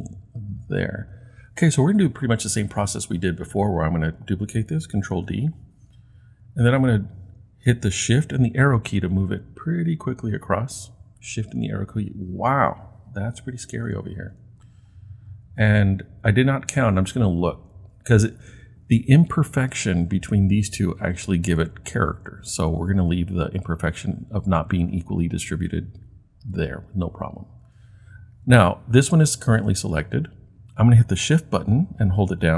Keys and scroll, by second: 5.1 super+d, 8.6 shift+Right, 8.9 shift+Right, 15.4-16.2 Right, 16.5 Right, 16.7 Right, 17.3 Right, 17.3 Right, 20.7 Right, 21.2 Right, 21.8-23.0 Right, 23.5 Right, 23.6 Right, 23.7-24.0 typing, 25.9 typing.